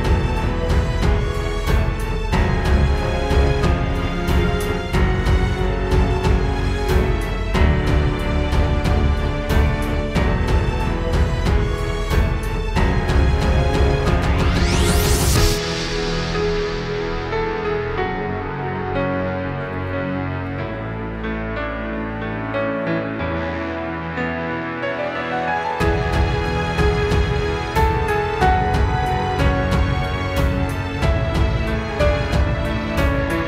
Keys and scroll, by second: 0.2 space, 2.9 space, 3.1 space, 11.7 super+z, 18.5 space, 19.1 space, 22.4 space, 22.9 space, 23.1 space, 23.6 alt+super+space, 23.9 alt+super+space, 24.6 alt+super+space, 32.2 space, 32.9 space.